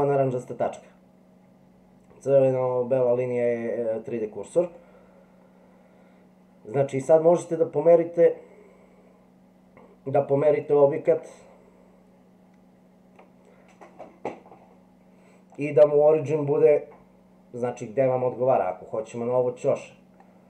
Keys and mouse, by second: 4.8-7.0 middle drag, 10.7-13.2 middle drag.